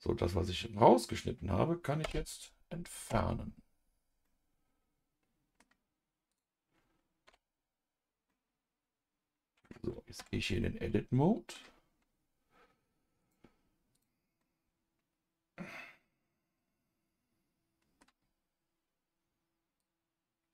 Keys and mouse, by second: 2.0 Delete, 3.0 KP_Divide, 4.2-5.6 middle drag, 7.2 KP_Divide, 8.2-9.6 middle drag, 10.1 Tab, 10.6 middle click, 13.3 click, 13.9 click, 14.4-18.0 middle drag, 19.8-20.5 drag.